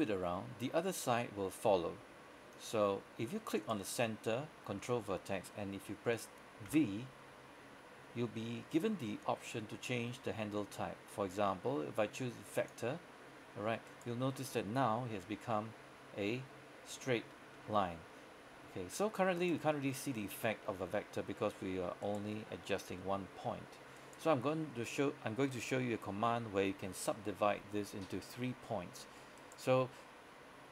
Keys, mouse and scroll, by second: 2.6 click, 3.6 right click, 6.8 v, 12.7 click, 14.0 right click, 15.2 g, 19.5 right click, 24.0 right click.